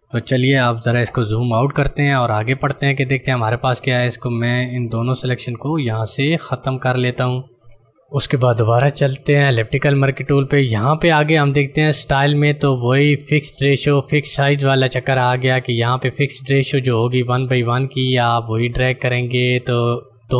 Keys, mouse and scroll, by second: 1.5 click, 1.9 right click, 2.3 click, 5.1 ctrl+alt+z, 7.8 d, 8.0 click, 12.1 click, 17.7 ctrl+click.